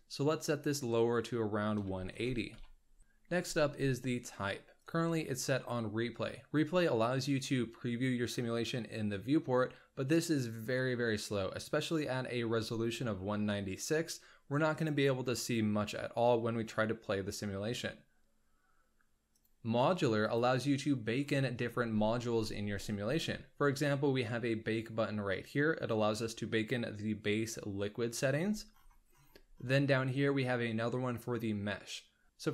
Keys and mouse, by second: 4.8-12.6 drag, 14.8-18.6 drag, 19.3-20.5 drag.